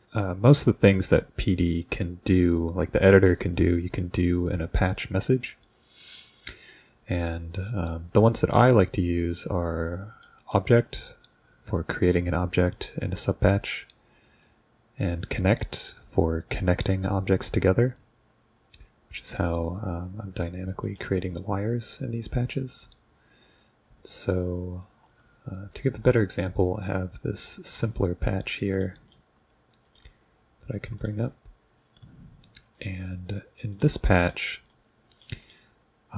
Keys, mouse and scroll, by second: 8.6-10.3 drag, 10.4 click, 13.0-14.4 scroll down 2, 14.4-15.6 drag, 15.7 click, 20.9 click, 24.4-26.5 drag, 27.0-27.8 drag, 28.8 click, 29.9 click, 31.0 click, 32.8 click, 33.8 click, 34.3 drag, 34.7-35.2 drag, 35.4 click.